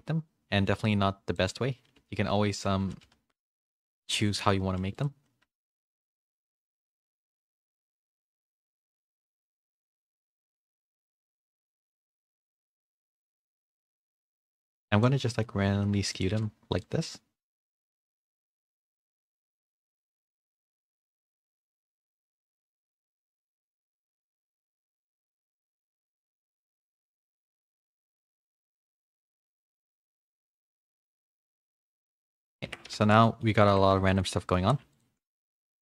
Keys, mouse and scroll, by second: 1.9 w, 2.8 g, 4.3 shift+middle click, 4.6 2, 4.9 alt+click, 5.5-6.5 alt+drag, 6.5 w, 8.5 click, 10.5 alt+2, 10.5 alt+click, 11.7 click, 13.7 alt+click, 14.6 click, 16.1-20.4 alt+drag, 22.8 g, 24.4 alt+click, 25.2 click, 27.1 click, 29.0 alt+2, 29.0 click, 29.6-30.6 drag, 31.0 g, 32.6 Tab, 33.2 middle click, 33.2 a, 33.6 Tab, 34.0 shift+middle click, 34.4 middle click, 34.6 3, 34.9 alt+click, 35.3 s.